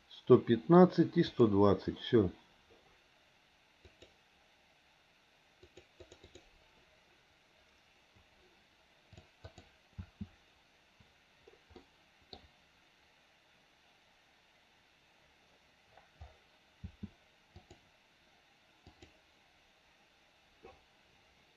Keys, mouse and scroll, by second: 1.3 click, 3.9 click, 5.6 click, 6.0 click, 6.2 click, 9.5 click, 9.9 space, 11.8 middle click, 16.8 space, 17.6 click, 18.9 click.